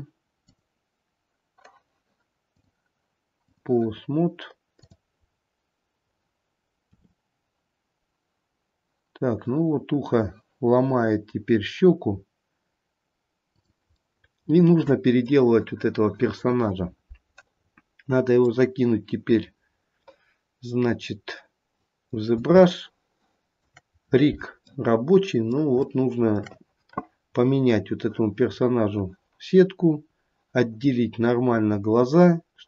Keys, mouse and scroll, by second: 0.8 click, 5.1 click, 5.6-7.1 scroll down 2, 7.1 r, 14.2 middle click, 14.8 middle click, 17.7-18.6 scroll down 2, 18.6 middle click, 18.6-20.6 scroll down 1, 20.6 middle click, 22.9 shift+middle click, 23.4 shift+middle click, 24.9 middle click, 26.0 shift+middle click, 27.5-28.7 scroll up 5, 28.7-29.1 scroll down 3.